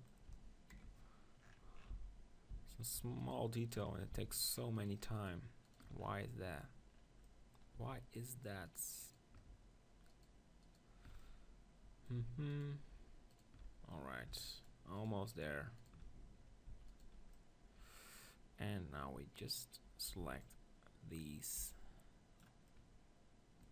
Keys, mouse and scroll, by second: 1.4-3.2 middle drag, 1.9 z, 2.5 z, 3.2 click, 3.9-6.2 right drag, 6.2-9.0 middle drag, 8.2-11.4 right drag, 11.2 middle click, 17.9-20.1 middle drag, 17.9 right click, 20.1 b, 21.6 b, 22.7-23.7 middle drag.